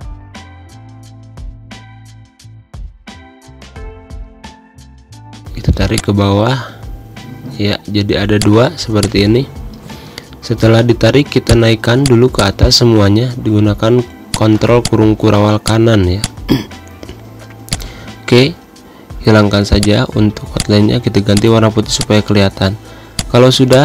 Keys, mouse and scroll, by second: 5.4 v, 6.1-8.2 alt+drag, 8.2 z, 8.5 click, 9.0 space, 9.1 click, 9.9 ctrl+shift+], 11.6 click, 13.6 ctrl+shift+], 14.3 space, 14.5 click, 14.7 space, 15.0-17.8 drag, 18.5-19.6 typing, 20.0 click, 21.1 z, 21.5 click, 22.0 space, 22.1 click, 22.6 space, 23.3 click.